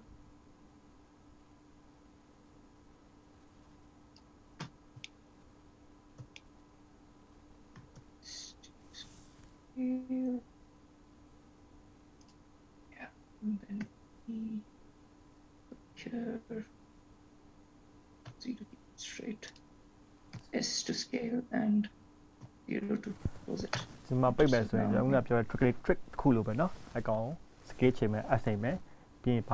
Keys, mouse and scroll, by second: 5.7 shift+middle click, 6.6-7.1 scroll up 1, 7.1 scroll up 2, 7.5 shift+middle click, 8.4 s, 14.0 e, 20.5 s, 24.7 click, 25.5-26.6 scroll down 7, 26.7 shift+middle click.